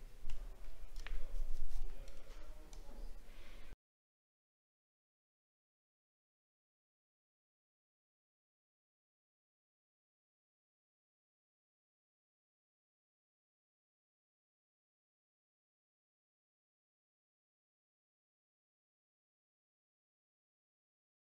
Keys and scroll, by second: 10.3 alt+scroll up 1, 12.4 alt+scroll up 1, 14.4 alt+scroll up 1, 17.3 alt+scroll down 1, 18.1 alt+scroll down 1.